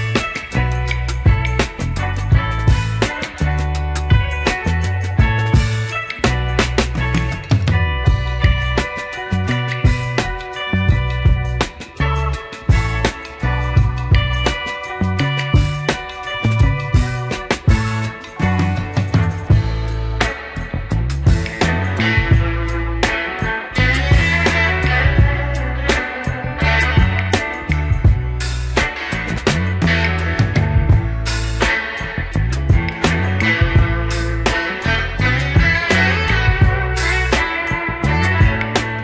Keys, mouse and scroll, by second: 0.2 Tab, 1.9 KP_3, 3.2 middle drag, 4.1 Tab, 4.9 alt+click, 5.7 f, 6.0 Tab, 6.7 Tab, 7.3 3, 7.4 click, 8.1 Tab, 9.0 Tab, 9.7 shift+s, 10.7 Tab, 11.2 click, 11.9 KP_3, 12.6-12.9 scroll down 2, 12.9 shift+middle drag, 14.6-18.5 drag, 19.8-22.9 drag, 23.5 click, 24.2-24.7 scroll up 2, 24.6 click, 24.7 Tab, 25.7 Tab, 25.9 click, 26.4 click, 28.0 s, 31.9 g, 34.9 click, 35.3-37.0 middle drag, 37.6 KP_3, 38.2 scroll down 2, 38.6 shift+middle drag.